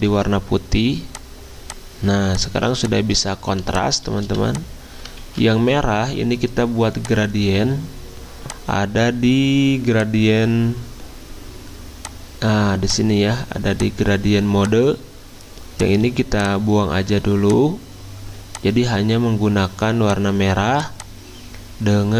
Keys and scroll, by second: 0.4 d, 2.7 z, 4.0-4.7 typing, 5.2 ctrl+z.